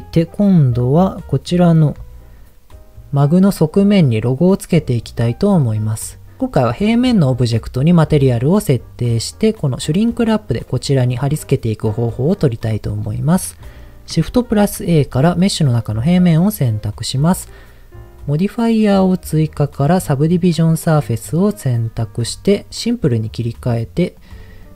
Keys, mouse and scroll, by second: 12.2 middle click, 14.5 shift+a, 21.8-22.7 scroll down 4, 23.1 click, 23.1 scroll down 1, 24.1 click, 24.4-24.7 drag.